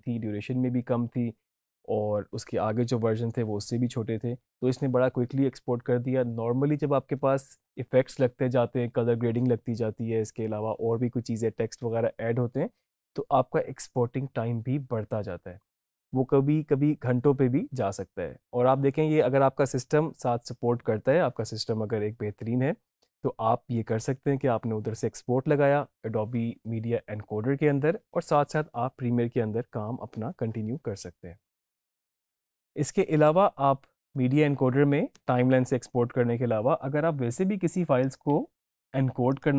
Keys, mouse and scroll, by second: 31.7 alt+Num_Lock, 32.1 click, 33.0 alt+Num_Lock, 33.0 click, 33.2 alt+Tab, 37.9 click.